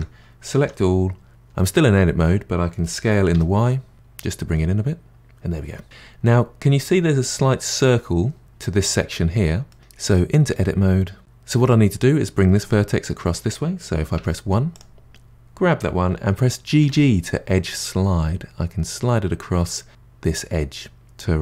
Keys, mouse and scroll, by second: 0.5 a, 2.8 s, 5.2-6.3 middle drag, 9.7-11.2 middle drag, 14.2 1, 14.7 click, 16.7 g.